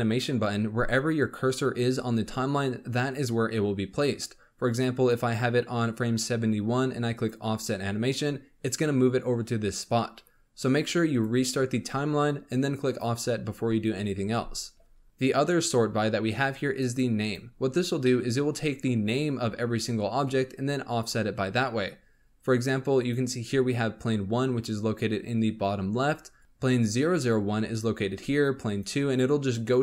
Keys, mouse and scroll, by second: 4.2-10.1 drag, 11.1-17.7 drag, 18.0-21.1 middle drag, 22.9 click, 26.3 click, 28.6 click, 29.0 click, 29.4 click.